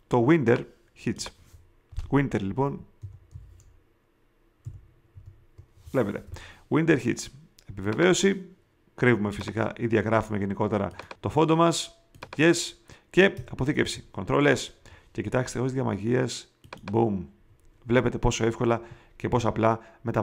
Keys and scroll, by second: 2.4-5.1 typing, 13.7 super+s.